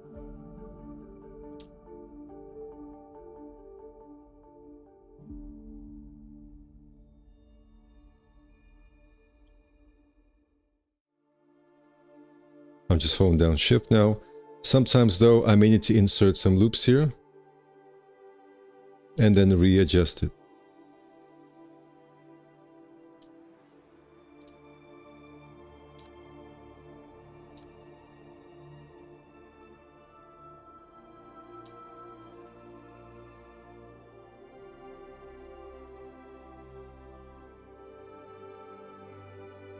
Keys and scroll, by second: 16.5 alt+s, 17.9 1, 19.1 ctrl+1.